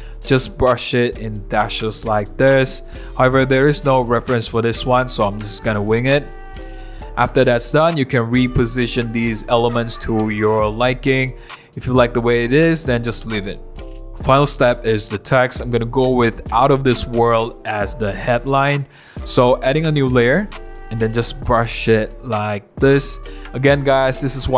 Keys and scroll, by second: 1.6 super+z, 2.9 super+z, 3.4 super+z, 4.3 super+z, 4.9 super+z, 5.4 super+z, 5.9 super+z, 6.8 v, 7.0 super+-, 11.4 super+z, 14.6 super+z, 14.8 [, 16.5 [, 17.7 super+z.